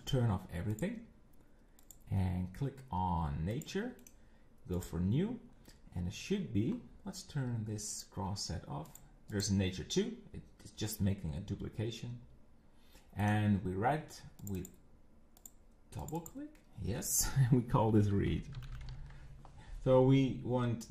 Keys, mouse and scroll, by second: 0.0 click, 0.7 click, 1.8 click, 3.6 click, 4.0-5.5 right drag, 5.5-6.3 scroll down 13, 6.4-7.9 scroll up 13, 7.9 click, 8.9 click, 9.3 click, 13.2-14.4 right drag, 14.4 click, 14.6 click, 15.4 click, 16.0 click, 16.2-18.7 drag, 18.7 e, 20.8 click.